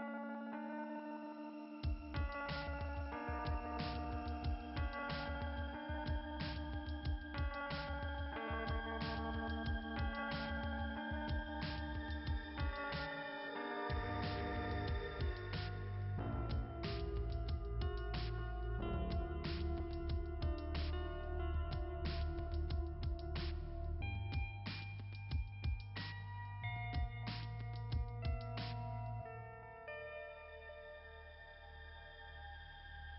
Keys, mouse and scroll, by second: 5.3 click, 18.3 click, 18.4 click, 19.1 click, 19.2 click, 26.8-27.4 scroll up 1.